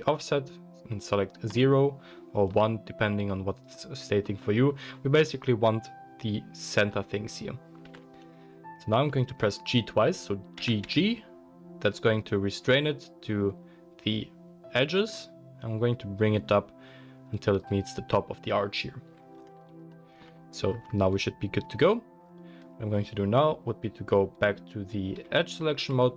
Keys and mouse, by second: 1.5-19.2 drag, 7.8 KP_1, 10.6 g, 19.2-20.2 middle drag, 21.8 click, 25.2 2.